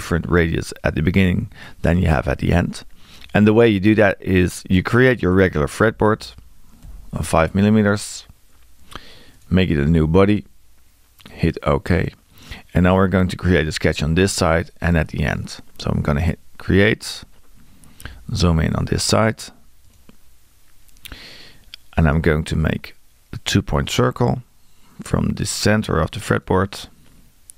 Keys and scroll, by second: 5.8 e.